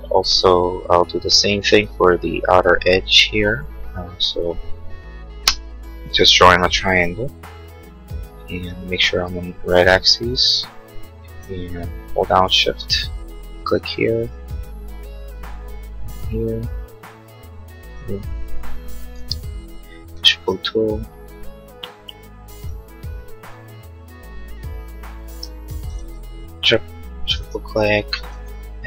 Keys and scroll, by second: 4.3 l, 19.2 p, 25.3 space.